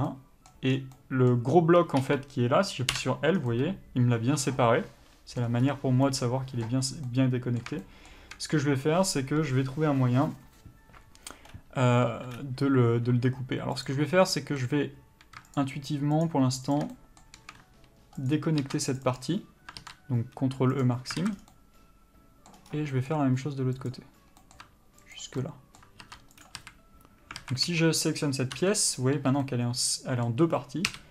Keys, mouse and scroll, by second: 0.0 shift+middle click, 0.3 middle click, 1.0 scroll down 1, 1.2 middle click, 2.3 3, 3.2 l, 3.6 scroll down 1, 3.8 middle click, 5.9-6.3 scroll up 1, 6.3 middle click, 8.1 shift+middle click, 9.1-11.8 scroll up 1, 13.3 2, 14.0 click, 14.6 middle click, 15.8 shift+click, 17.2 middle click, 18.6 ctrl+click, 19.3 ctrl+e, 21.5 alt+a, 21.6 scroll down 1, 21.8 middle click, 23.0 scroll up 1, 23.2 middle click, 24.0 click, 24.7 middle click, 25.4 ctrl+click, 25.7 middle click, 26.7 ctrl+e, 26.9 a, 27.7 alt+a, 28.0 3, 28.8 l, 29.5 scroll down 1, 29.7 middle click, 30.8-31.1 scroll up 1.